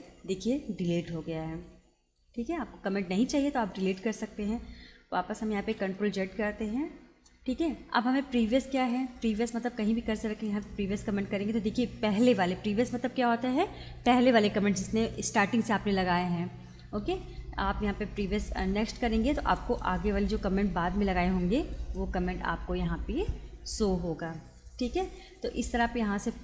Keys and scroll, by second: 5.4 ctrl+z.